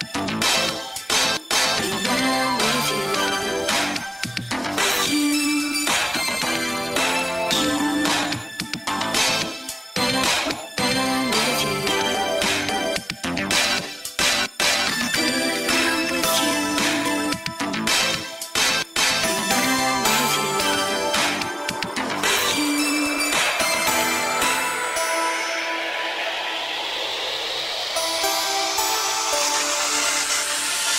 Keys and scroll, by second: 0.5 Left, 2.4 ctrl+KP_1, 3.2 f, 4.0 ctrl+Left, 5.1 ctrl+KP_1, 6.3 ctrl+KP_1, 6.8 ctrl+KP_1, 7.3 ctrl+KP_1, 10.5 ctrl+KP_1, 12.6 ctrl+KP_1, 13.0 ctrl+z, 13.7 ctrl+KP_1, 14.2 ctrl+KP_1, 15.3 f, 15.6 ctrl+Left, 16.5 ctrl+Left, 17.0 ctrl+KP_1, 18.8 ctrl+KP_1, 22.7 shift+., 24.3 f, 27.0 shift+., 27.4 Left, 27.8 ctrl+z, 29.5 ctrl+KP_1.